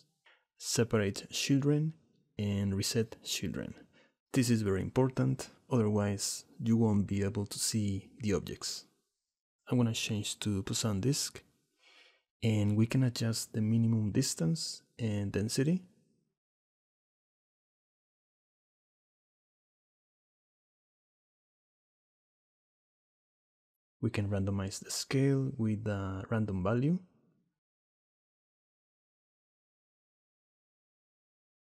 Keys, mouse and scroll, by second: 2.0 click, 7.9 click, 9.8-11.1 drag, 12.5-14.3 shift+drag, 14.7-16.1 drag, 16.5 click, 17.2 middle click, 18.0 middle click, 19.3 middle click, 20.9-22.3 shift+middle drag, 22.8 click, 23.2 shift+middle click, 24.6 shift+middle click, 25.2 shift+a.